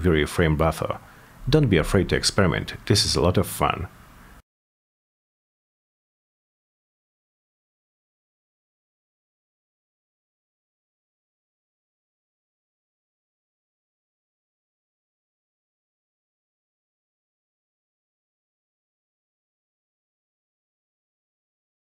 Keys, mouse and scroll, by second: 0.9 click, 1.6 click, 1.9 middle click, 3.3 click, 3.5 click, 4.1 click, 5.1 Return, 6.1-7.8 drag, 7.9 click, 8.1 Return, 8.6-9.9 drag, 10.6 click, 10.8 click, 11.3-12.3 drag, 12.5-13.5 drag, 13.7 click, 14.0 click, 14.3 Return, 14.6 click, 15.2 click, 15.5-16.3 drag, 16.4 click, 16.6 Return, 17.2 click, 17.5 click, 18.0 -, 18.1 ,, 18.3 Return, 19.1 click, 20.4 click, 20.6 click, 21.7 click.